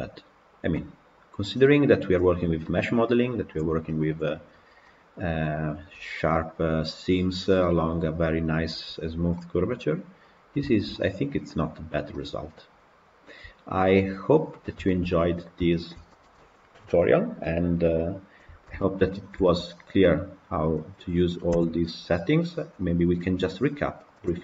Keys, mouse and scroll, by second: 2.0-2.7 scroll down 1, 2.9 click, 3.7-4.2 middle drag, 4.2-4.7 scroll up 1, 4.7-5.1 middle drag, 5.1 scroll up 2, 7.5-9.1 middle drag, 9.1 scroll down 1, 9.3-11.8 middle drag, 11.8 scroll down 2, 12.0-14.4 middle drag, 14.4-14.7 scroll down 2, 14.7-20.6 shift+middle drag, 20.6 click, 21.4 Delete, 22.8 click, 24.1 click.